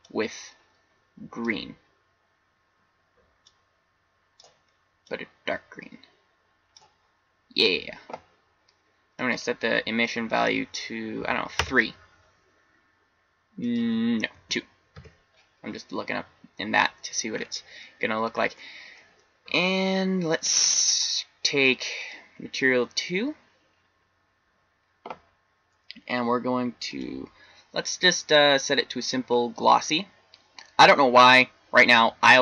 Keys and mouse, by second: 17.9-21.3 middle drag, 21.9 click, 28.6 middle click.